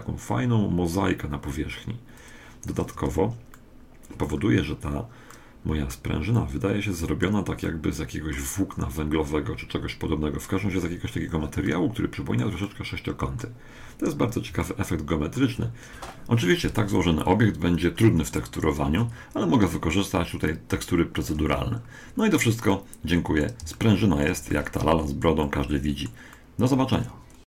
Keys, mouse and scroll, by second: 3.0 Tab, 3.0-4.3 drag, 3.5 middle click, 3.8 middle click, 4.3-9.5 middle drag, 11.7-14.5 middle drag, 14.5 scroll down 1, 14.7-15.9 middle drag, 17.9 scroll up 1, 18.1-20.3 middle drag, 19.0 Tab, 21.4 Tab, 21.7 middle click, 22.3-22.7 scroll down 1, 22.7-27.5 middle drag.